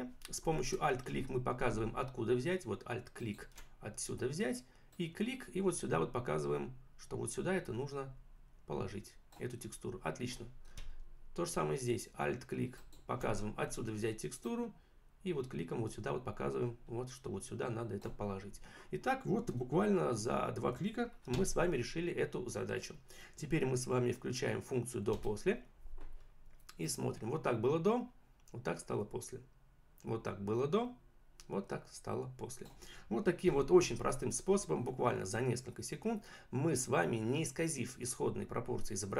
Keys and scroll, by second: 21.3 v, 25.2 `.